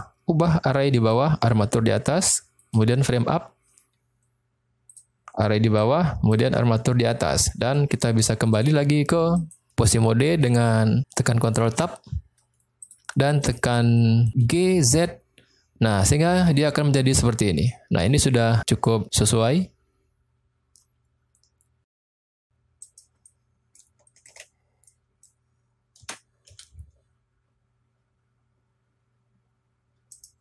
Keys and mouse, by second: 0.0-1.2 drag, 2.6 click, 4.9 drag, 5.7-6.4 drag, 7.5 middle click, 8.6 click, 9.5 click, 10.1-10.5 shift+middle drag, 11.7 ctrl+Tab, 12.8 click, 13.5 click, 14.0 middle click, 14.4 g, 14.9 z, 22.7 right click, 23.2-23.7 middle drag, 23.9-24.3 shift+middle drag, 24.8 middle click, 25.9 g, 26.4 z, 30.1 click.